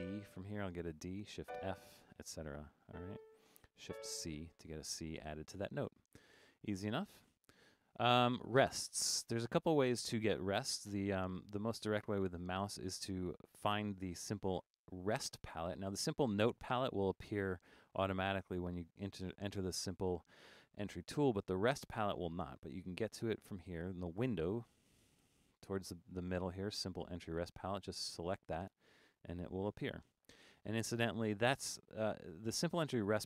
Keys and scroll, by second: 1.4 shift+f, 3.9 shift+c.